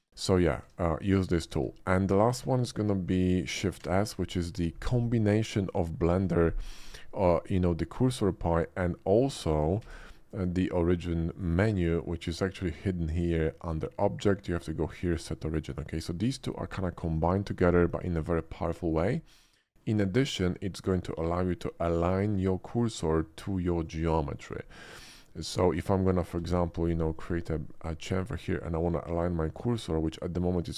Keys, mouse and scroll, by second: 0.7 Tab, 1.5 x, 1.8 click, 2.3 middle click, 3.1 shift+middle drag, 3.3 shift+middle drag, 3.8 shift+s, 8.1 right click, 9.9 shift+a, 11.3 click, 13.1 click, 18.4-18.9 middle drag, 19.5 shift+middle drag, 20.8-21.6 shift+middle drag, 23.8 click, 24.3 middle click, 25.0 Tab, 25.4 click, 26.3 ctrl+b, 27.1 click, 27.5 middle click, 28.8 middle click.